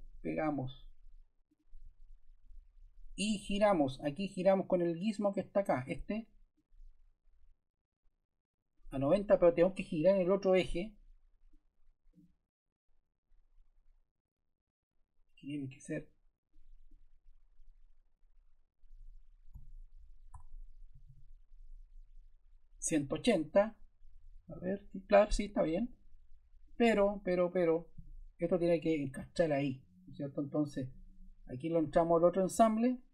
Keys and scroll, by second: 19.4-21.5 typing.